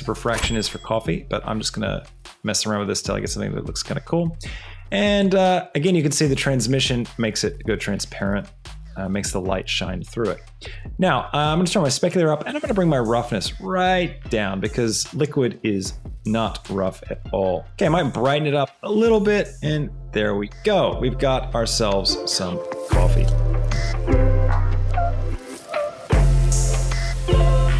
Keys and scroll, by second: 20.4 shift+space, 23.4 space.